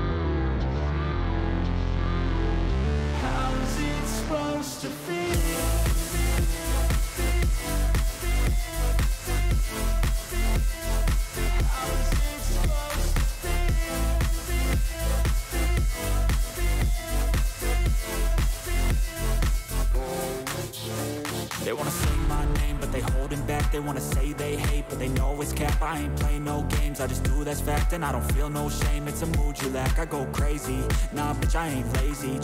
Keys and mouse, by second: 0.0 click, 1.2-2.3 drag, 3.4 click, 4.1 click, 5.3 click, 8.1-9.7 drag, 11.8 click, 12.4 click, 14.4 click, 15.0 click, 16.1 click, 16.9 click, 18.3 click, 18.9 click, 19.5 click, 20.9 click, 22.5 click, 26.0 click, 26.5 click, 28.0 click, 29.9 click, 30.8 click.